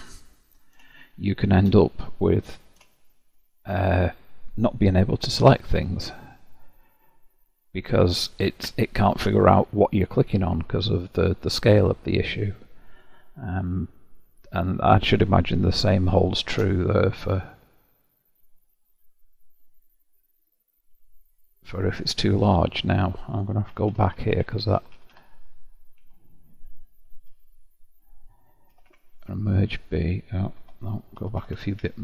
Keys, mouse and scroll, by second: 4.1 click, 5.1 g, 7.7-10.7 middle drag, 12.1-14.1 middle drag, 14.1-14.7 scroll down 1, 14.7 scroll down 1, 14.9-20.0 middle drag, 22.3-23.7 scroll down 6, 23.7-24.9 ctrl+z, 27.1 KP_Decimal, 28.7 m, 30.6 Escape, 31.2 ctrl+z, 31.4 ctrl+z, 31.9 ctrl+z.